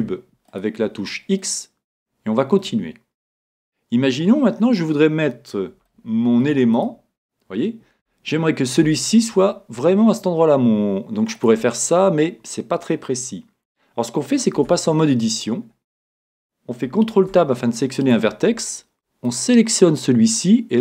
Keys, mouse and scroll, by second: 1.4-3.2 middle drag, 4.6-10.2 middle drag, 6.7 right click, 10.0-10.9 scroll up 1, 10.9 middle click, 11.3-13.1 drag, 14.5 Tab, 15.6-17.1 middle drag, 17.1 ctrl+Tab, 17.6 middle click, 19.2 right click.